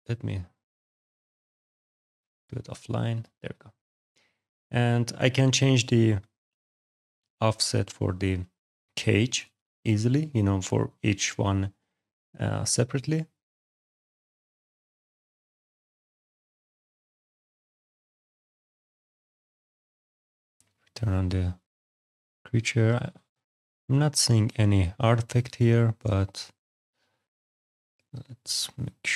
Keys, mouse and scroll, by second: 1.3 click, 2.0 click, 3.5 click, 4.2 click, 5.1 alt+click, 9.3 click, 12.0 click, 13.0 click, 13.9 click, 16.9-17.2 scroll, 18.1-18.4 scroll, 18.5 ctrl+z, 20.1 click, 20.6 alt+click, 22.7 alt+right click, 23.0 alt+middle click, 23.1 alt+right click, 23.4 alt+right click, 23.8 alt+right click, 24.4 alt+click, 24.6 alt+click, 26.9 click, 27.5 alt+click, 29.0 alt+click.